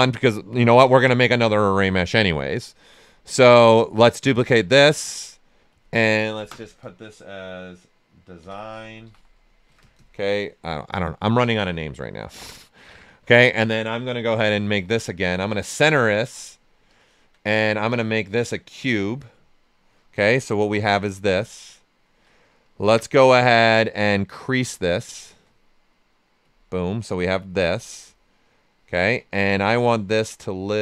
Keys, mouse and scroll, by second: 8.1-9.6 typing, 12.3 alt+Return, 12.4 alt+right click, 14.2 w, 15.6 click, 17.9 click, 20.4 click, 20.8 shift+f, 21.3 ctrl+right click, 22.6-25.0 drag, 25.0 shift+click, 26.4 click, 28.1 ctrl+right click, 29.3 w, 29.6 right click, 30.5-30.8 drag.